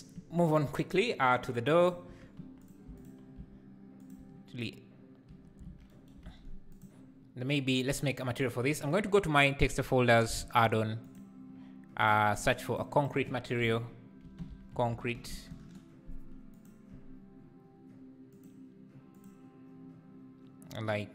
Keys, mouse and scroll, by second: 1.9 click, 2.1 Tab, 2.4 3, 2.6 click, 2.9 shift+click, 4.1 x, 4.2 Tab, 5.7 alt+a, 6.9 click, 11.3 click, 12.7 click, 12.9-21.1 drag.